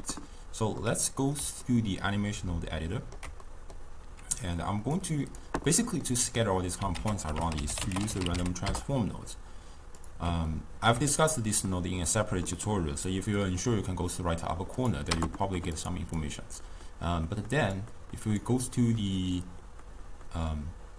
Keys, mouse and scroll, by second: 0.8-5.1 middle drag, 5.1-9.1 drag, 9.1 ctrl+a, 13.8 middle click.